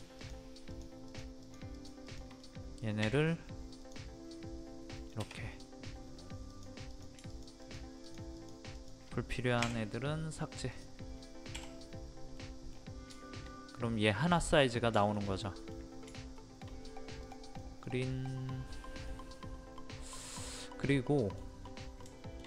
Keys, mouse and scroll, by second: 0.7 shift+click, 1.1 shift+click, 1.4 shift+click, 1.7 shift+click, 2.1 shift+click, 2.4 middle click, 3.8 click, 5.4 middle click, 6.5 click, 7.3 shift+click, 8.0 shift+click, 8.4 shift+click, 8.8 shift+click, 9.6 shift+Delete, 10.7 click, 11.5 End, 12.3 middle click, 12.7 scroll down 1, 12.8-13.1 scroll up 1, 13.1 shift+middle click, 15.0 shift+middle click, 16.0 scroll up 2, 16.4 shift+middle click, 16.8-17.2 scroll up 1, 17.2 click, 17.6 middle click, 20.2 scroll down 1, 20.8 middle click, 21.4 scroll down 1, 22.0 middle click.